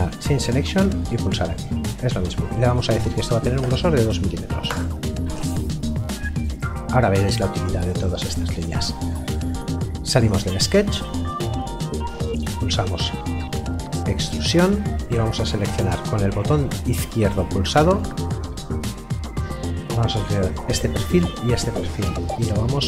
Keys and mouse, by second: 3.6 KP_2, 4.7 Return, 10.2 click, 11.2 middle click, 12.4 e, 15.5 click, 20.2 click.